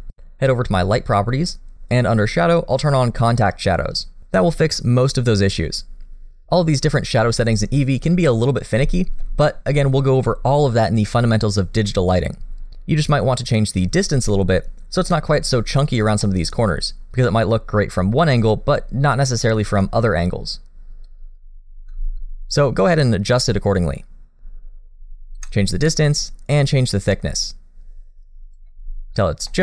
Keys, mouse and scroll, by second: 1.7 click, 2.4 click, 4.2 click, 8.3-8.8 scroll down 1, 8.8 middle click, 9.5 shift+middle click, 10.2 middle click, 16.2 middle click, 21.0 click, 25.3 click, 29.5 middle click.